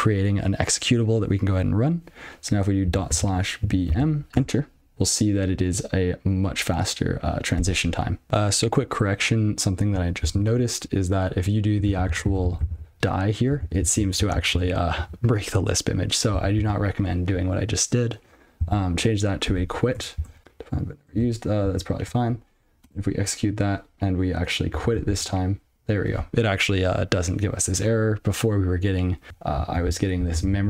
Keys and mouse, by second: 3.1 /, 3.9 b, 4.3 m, 11.8 ctrl+b, 15.3 ctrl+?, 17.3 ctrl+s, 20.1 Return, 20.3 alt+p, 20.4 Return, 22.4 alt+p, 24.7 click, 25.5 ctrl+g, 29.3 ctrl+p, 30.1 ctrl+n.